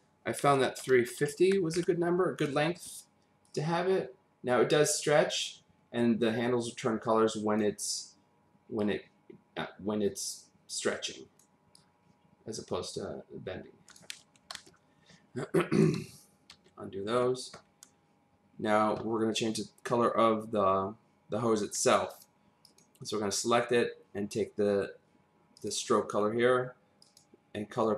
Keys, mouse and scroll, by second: 0.8-1.3 typing, 1.7 Return, 3.5 click, 8.8 click, 11.7 click, 14.5 ctrl+z, 16.0 ctrl+z, 16.5 ctrl+z, 22.1 click, 22.6 click, 25.6 click, 27.0 click.